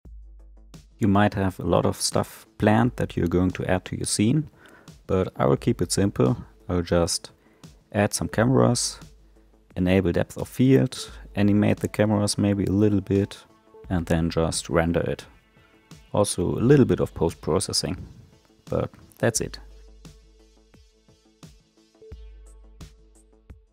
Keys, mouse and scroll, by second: 0.0 middle click, 0.2 ctrl+alt+KP_0, 0.3-2.1 typing, 0.7 click, 2.6 click, 3.2 click, 3.5 r, 3.9 i, 4.4 right click, 4.5 click, 4.6 space, 5.6-6.9 typing, 5.7 drag, 6.7 click, 8.0 right click, 8.1 click, 8.2 space, 9.5 space, 11.1 shift+a, 11.3 click, 11.4-11.7 scroll down 14, 11.4 middle click, 11.6 middle click, 11.7 scroll up 1, 11.8 scroll down 1, 11.8 middle click, 12.2 click, 12.7 click, 13.0 ctrl+alt+KP_0, 13.2 g, 13.5 g, 14.5 click, 15.1 g, 15.5 r, 15.8 g, 16.3 right click, 16.4 click, 16.5 space, 17.5 space, 18.6 click, 18.8 g, 19.2 click, 19.9 space, 20.9 space, 21.0 click, 21.3 g, 21.9 click, 21.9 space, 22.3 right click, 22.5 right click, 23.4 space.